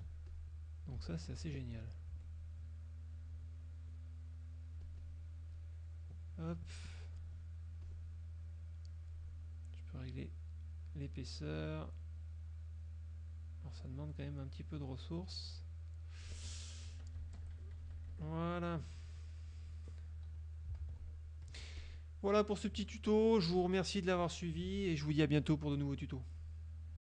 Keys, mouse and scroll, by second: 0.3 ctrl+click, 1.1 z, 1.4 click, 2.3 F2, 3.3 click, 4.9 click, 5.7 click, 7.3 click, 7.9 click, 9.2 click, 10.1-16.3 drag, 16.6 F1, 17.0 KP_Subtract, 17.5 Escape, 17.7 KP_Subtract, 19.1 click, 20.4 click, 20.9 ctrl+s, 21.2 ctrl+click, 21.7 ctrl+F1, 21.9 ctrl+click, 22.5 click, 23.6 click, 26.5 click, 27.0 click.